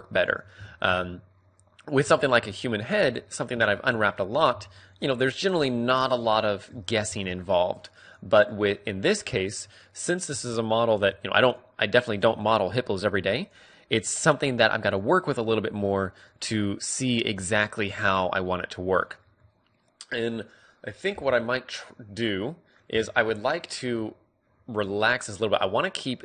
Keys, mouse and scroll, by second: 0.2 KP_3, 2.1-6.1 middle drag, 2.6 click, 3.1 right click, 4.9-8.4 right drag, 7.0 ctrl+e, 8.5-10.6 middle drag, 9.4 a, 10.6-11.9 drag, 11.0 u, 12.2 a, 13.0 u, 14.7 click, 15.3-20.9 middle drag, 21.8-26.2 middle drag.